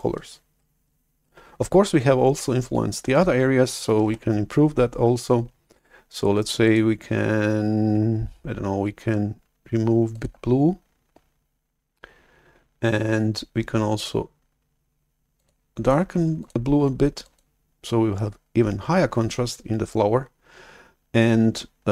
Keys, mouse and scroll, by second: 4.0 shift+super+F11, 6.5-7.6 drag, 10.2 click, 14.1-14.9 drag, 15.2 click, 16.3 click, 17.1 click.